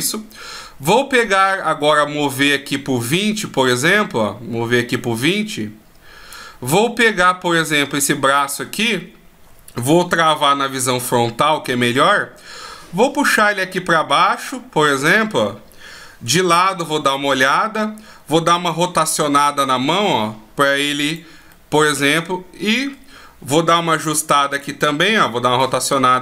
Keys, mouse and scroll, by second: 0.4 right click, 2.6 click, 9.7 KP_1, 10.7-12.8 scroll up 2, 12.8 click, 15.9 KP_3, 18.7 r, 21.1 middle click, 23.5 KP_1, 25.0 r.